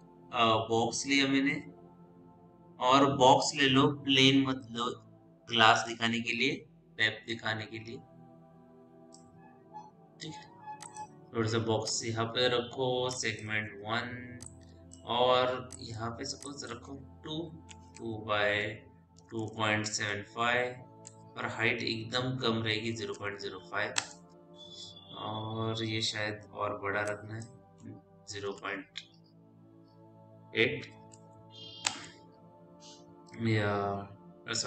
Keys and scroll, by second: 14.1 1, 17.8 Tab, 18.9 KP_2, 19.4 KP_Decimal, 19.8 KP_7, 20.2 KP_5, 20.8 Tab, 22.8 KP_0, 23.2 KP_Decimal, 23.5 5, 23.9 Return, 28.4 KP_Decimal, 30.7 KP_8, 31.7 Return.